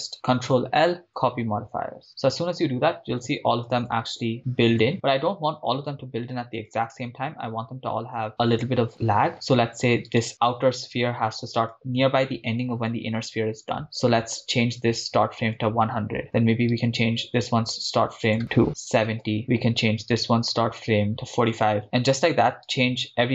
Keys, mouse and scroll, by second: 0.5 ctrl+l, 4.4-7.9 drag, 10.3 right click, 11.6-15.7 drag, 14.7 0, 16.9 click, 16.9 right click, 18.2-21.8 drag, 20.3 right click, 22.9 click, 22.9 right click.